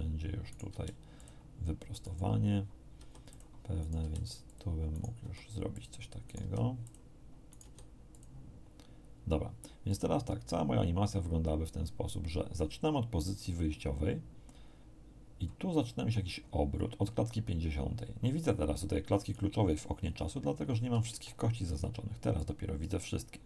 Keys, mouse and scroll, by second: 0.5 right click, 0.6 r, 1.2 click, 2.0 right click, 3.0 r, 3.3 click, 3.8 right click, 4.0 r, 4.4 click, 4.9 right click, 5.2 r, 5.7 click, 6.2 right click, 6.4 r, 6.8 click, 7.5 right click, 7.6 r, 8.1 click, 9.8-19.5 drag, 20.9 a, 22.4-23.4 drag.